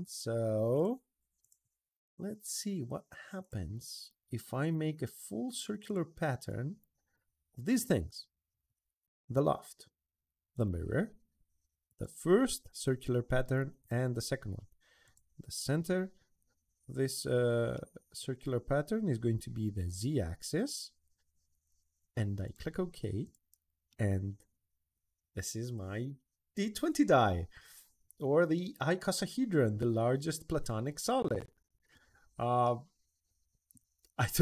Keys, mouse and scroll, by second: 0.5 click, 1.2 click, 3.2 click, 3.7 click, 5.6 click, 6.3 middle click, 6.9 middle click, 9.1 click, 10.3 click, 11.6 click, 13.6 click, 14.8 click, 16.6 middle drag, 17.1 middle click, 17.5-18.0 middle drag, 19.6 click, 22.2 click, 23.0 click, 23.7-26.8 middle drag, 27.1 middle drag, 27.8 middle click, 28.3-31.7 middle drag, 32.0 middle click, 32.4-33.8 middle drag, 33.9 middle click.